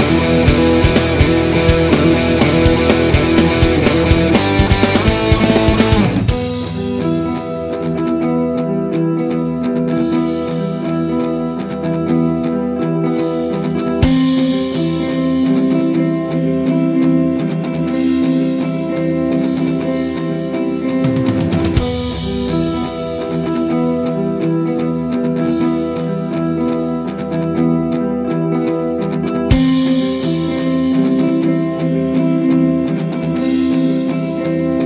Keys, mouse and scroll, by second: 0.7 click, 1.3 shift+middle click, 1.5-2.0 scroll up 1, 2.0 click, 2.4 click, 2.6 click, 3.6 alt+e, 5.2 click, 5.5 g, 7.0 click, 7.8 s, 8.7 middle click, 9.0 click, 9.2 scroll down 1, 9.4-11.4 middle drag, 11.4 click, 11.8 e, 12.8-14.0 middle drag, 13.4 s, 14.0 click, 15.5 g, 16.8-23.9 middle drag, 22.7 g, 23.9 click, 24.0 middle click, 24.5 click, 24.8-25.2 scroll down 1, 25.2 scroll up 1, 25.4 shift+middle click, 25.8 ctrl+r, 26.2 click, 26.6 middle click, 26.8-27.3 scroll up 1, 27.5-29.0 drag, 27.8 g, 29.8 middle click, 30.5-32.0 drag, 31.0 g, 31.8 Escape, 32.2-34.8 middle drag, 32.5 scroll down 1, 33.2-34.3 scroll down 1.